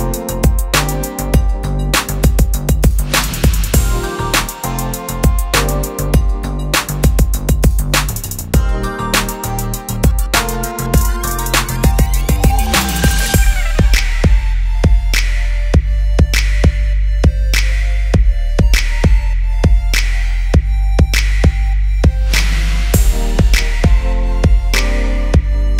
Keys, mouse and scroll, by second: 1.6 ctrl+z, 4.9 click, 10.3 click, 16.0-25.7 drag.